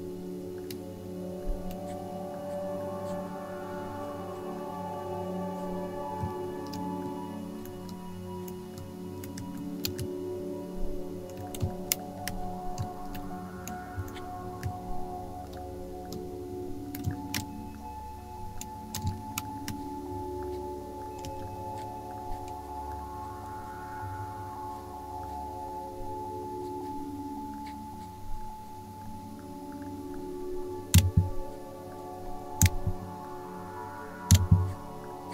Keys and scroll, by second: 11.6 alt+shift+space, 17.0 ctrl+alt+shift+space, 19.0 space, 21.2 v, 30.9 BackSpace, 32.6 Delete, 34.3 BackSpace.